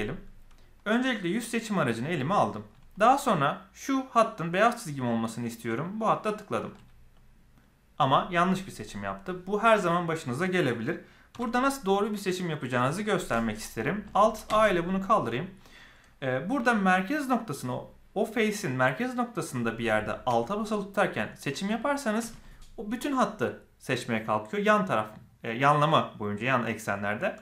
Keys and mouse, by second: 1.3 click, 6.1 alt+click, 11.3 KP_7, 14.4 alt+a.